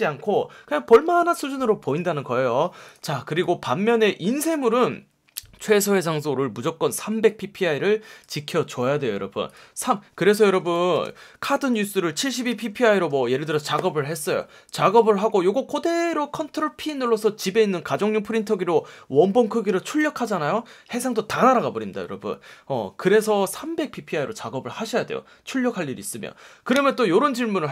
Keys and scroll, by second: 3.3 space, 10.5 space, 12.4 F1, 13.0 F1.